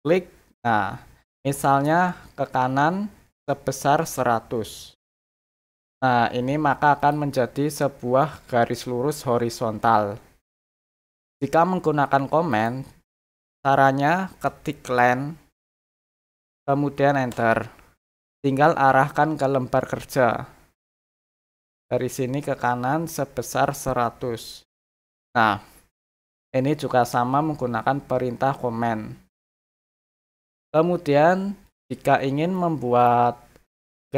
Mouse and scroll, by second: 7.0 click, 12.5 click, 21.5 click, 31.6 click, 32.5 middle click, 33.2 scroll up 1, 33.6 scroll down 1.